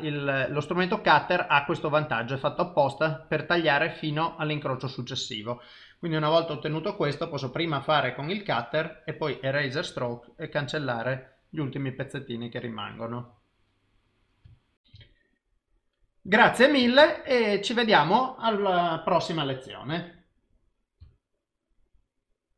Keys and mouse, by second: 17.0 ctrl+s.